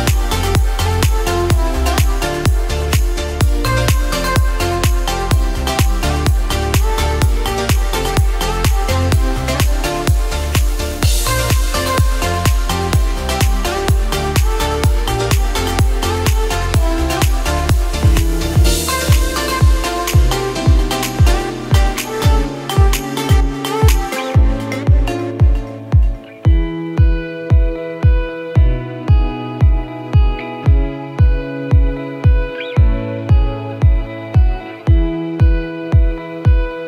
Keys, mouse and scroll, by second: 0.5 scroll up 1, 1.0-1.8 scroll down 1, 1.8 click, 2.7 alt+click, 3.3-3.6 scroll down 1, 4.1 click, 9.0 click, 9.6 alt+click, 12.0 click, 14.5 ctrl+KP_Add, 17.1-18.1 scroll down 1, 18.1 KP_Decimal, 19.2 KP_1, 20.2 click, 21.5-22.1 scroll down 1, 24.6-25.3 scroll down 1, 25.3 click, 32.0 click, 36.3 scroll down 1.